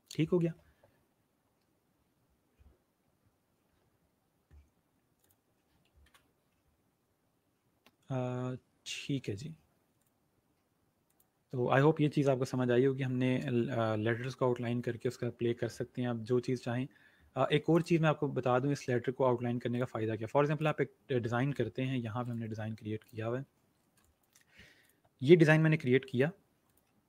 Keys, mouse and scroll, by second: 5.1 click, 9.9 click, 11.2 click, 17.6 click, 19.6 click, 23.5-23.9 alt+scroll up 2, 23.9 click.